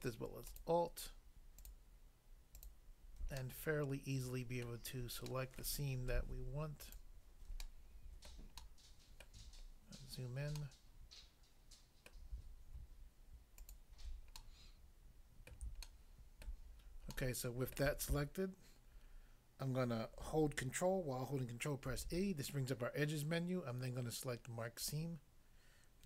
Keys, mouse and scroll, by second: 0.5 alt+click, 1.6 alt+click, 2.5 alt+click, 3.4 middle click, 4.6 middle click, 5.2 middle click, 5.6 middle click, 6.8 alt+click, 7.6 middle click, 8.4 middle click, 8.6 middle click, 9.2 middle click, 9.7 scroll up 1, 12.1 middle click, 13.6 alt+click, 13.7 alt+click, 14.4 middle click, 15.6 middle click, 15.9 shift+middle click, 21.8 ctrl+e, 24.8 click, 25.0 click.